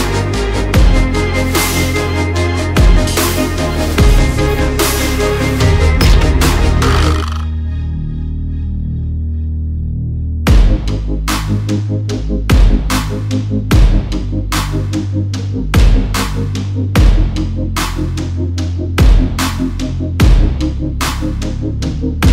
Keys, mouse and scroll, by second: 1.7 double click, 2.9 click, 7.5 alt+scroll down 1, 7.7 click, 9.8 click, 10.0 alt+scroll down 1, 11.3 alt+scroll down 1, 11.7 alt+scroll up 1, 15.4-15.7 alt+scroll down 1, 15.9 scroll up 1, 16.5 alt+scroll up 1, 16.8 alt+scroll down 1, 18.8 click, 21.2 alt+scroll up 1, 21.7 click.